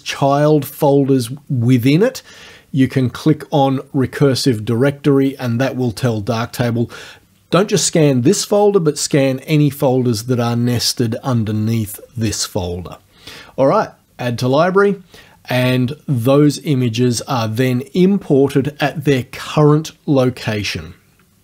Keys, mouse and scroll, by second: 14.5 click.